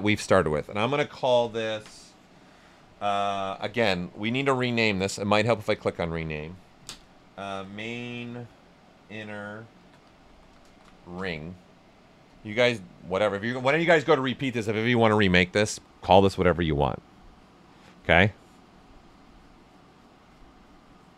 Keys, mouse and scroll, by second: 7.4-11.6 typing, 7.4 click, 12.2 Return.